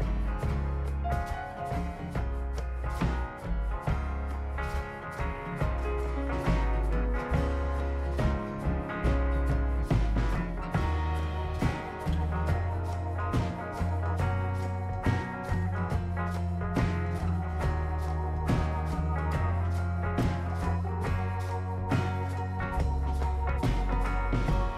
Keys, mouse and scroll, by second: 1.9 click, 3.2 scroll down 1, 3.5 click, 4.4-4.9 drag, 5.0 middle drag, 5.3 right click, 5.7 click, 6.2 scroll down 1, 6.5 right drag, 6.9 scroll down 1, 7.3 right click, 8.8 click, 10.3 click, 15.3 click, 17.1 click, 18.1 click, 19.6 click, 20.5 click, 21.2 click, 22.0 click, 22.9 click, 24.0 click.